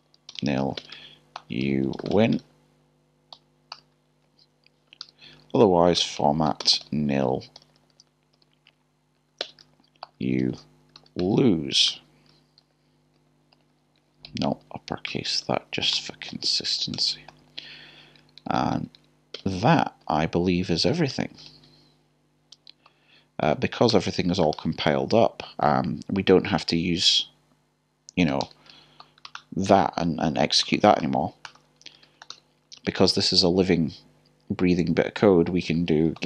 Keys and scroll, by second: 3.3 typing, 9.2 typing, 10.2-11.0 typing, 12.4-13.7 typing, 16.3-18.2 typing, 22.5-24.0 typing, 30.6-32.9 typing.